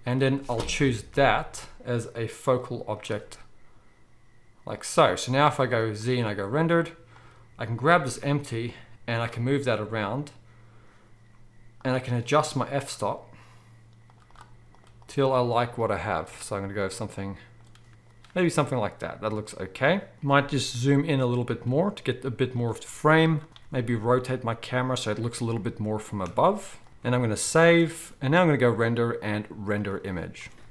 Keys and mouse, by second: 0.0 click, 0.7 KP_0, 2.4 click, 2.4 middle click, 5.4 z, 7.1 click, 7.1 middle click, 7.9 g, 11.7 click, 11.7 middle click, 14.0-20.1 drag, 14.0-20.1 middle drag, 20.1 z, 20.6 g, 21.6 g, 23.5-25.2 drag, 23.5-25.2 middle drag, 23.6 r, 25.5 g, 26.9-28.7 ctrl+drag, 26.9 z, 27.2 ctrl+s, 27.5 ctrl+s, 27.6 ctrl+s.